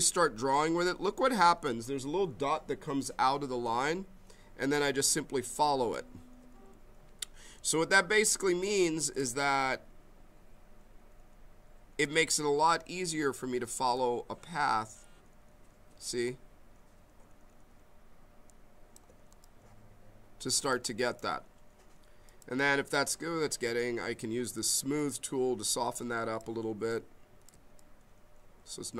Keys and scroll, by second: 7.5 b, 9.5 m, 26.8 b.